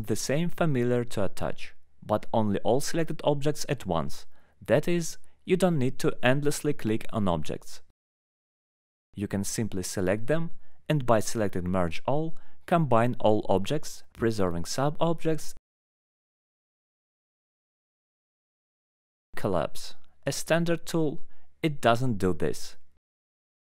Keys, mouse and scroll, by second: 0.5 click, 1.4 alt+middle click, 1.6 right click, 3.8 click, 4.3 click, 5.3 click, 5.9 alt+middle click, 6.4 ctrl+click, 7.7 click, 8.1 right click, 8.9 ctrl+click, 9.2 ctrl+click, 9.4 click, 9.5 alt+middle click, 9.5 scroll down 1, 9.8 scroll up 1, 9.8 scroll down 1, 10.0 scroll up 1, 10.1 alt+middle click, 10.3 scroll down 1, 11.2 click, 11.5 scroll up 1, 12.3 ctrl+click, 12.8 alt+middle click, 13.4 alt+middle click, 14.1 ctrl+click, 14.6 middle click, 18.2 ctrl+right click, 18.8 alt+middle click, 19.2 ctrl+click, 20.6 middle click, 20.9 alt+middle click, 21.3 click, 21.9 middle click, 23.0 click.